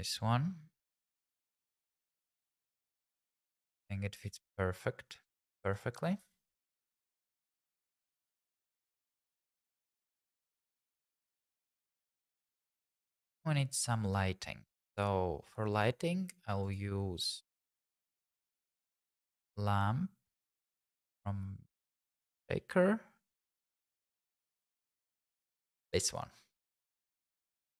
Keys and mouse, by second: 2.4 g, 2.6 x, 3.4 click, 4.2 s, 4.3 z, 5.2 click, 6.0 s, 6.2 z, 7.5 click, 8.1 g, 8.3 y, 9.0 click, 9.6 g, 9.8 y, 10.5 click, 12.0 shift+middle click, 14.0-15.8 drag, 16.7 click, 18.0-20.2 drag, 25.9 click.